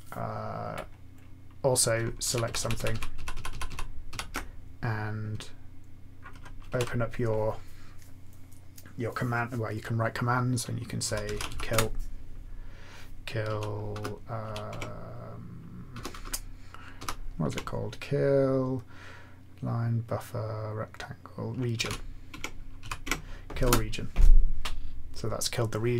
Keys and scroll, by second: 2.3 shift+Right, 2.4 shift+Right, 2.6 shift+Right, 2.7 shift+Right, 2.9 shift+Right, 3.3 shift+Right, 3.5 shift+Right, 4.0 shift+Right, 6.6 alt+x, 10.7-11.9 typing, 13.4 s, 14.4 s, 14.6 Tab, 15.9-18.1 typing, 21.5-22.8 typing, 22.3 Tab, 23.0 Tab, 23.6 Return.